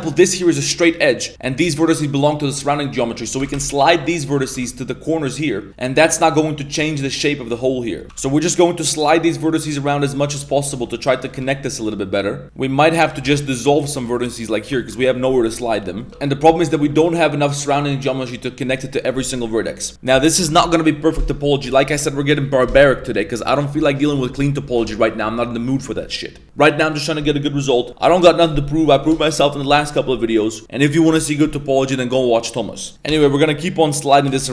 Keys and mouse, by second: 0.1 ctrl+right click, 1.4 1, 1.6 right click, 3.4 g, 4.2 right click, 4.3 g, 5.8 a, 7.8 middle click, 9.1 middle click, 9.1 g, 10.2 right click, 11.1 right click, 11.2 g, 12.8 shift+right click, 13.2 x, 14.7 middle drag, 15.5 middle click, 15.9 right click, 16.4 a, 16.4 1, 16.7 3, 16.9 right click, 17.7 1, 32.9 g, 33.9 right click.